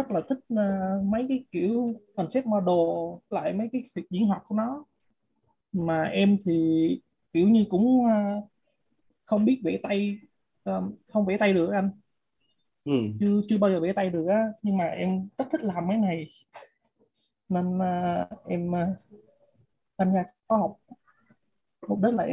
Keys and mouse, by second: 1.3 click, 12.8 click, 15.1 click, 21.6 click.